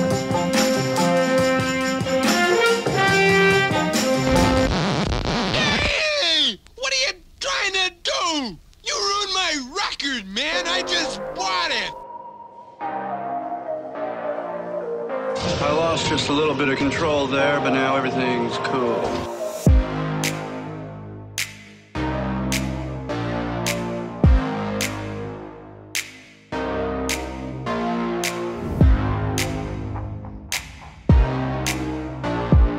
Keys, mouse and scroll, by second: 0.2 Tab, 0.8 alt+a, 2.5 middle drag, 2.6 click, 3.0 shift+right click, 4.0-4.8 ctrl+KP_Add, 5.0 ctrl+KP_Add, 5.6 middle drag, 7.0 g, 7.1 y, 8.4 click, 8.7 KP_1, 8.9 KP_3, 9.6 click, 10.0 click, 10.8 g, 10.9 x, 12.1 click, 12.5 click, 13.8 Tab, 14.2 click, 16.5-16.9 middle drag, 16.9 Tab, 17.9 click, 18.5-19.2 drag, 19.2-20.0 typing, 20.0 click, 20.3 Tab, 20.6 middle click, 20.9 click, 21.3 click, 22.5-23.1 drag, 23.7 click, 26.5 click, 27.0 ctrl+click, 27.8 click, 28.1 Tab, 28.5 middle click, 28.9 click, 29.2-29.8 ctrl+KP_Add, 30.4 g, 31.1 x.